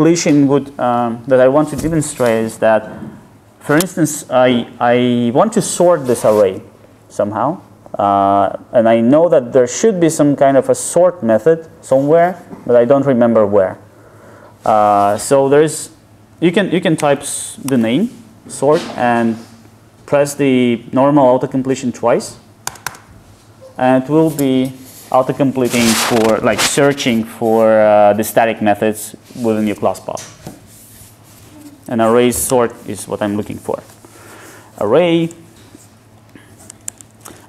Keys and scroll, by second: 22.7 ctrl+space, 32.5 Return.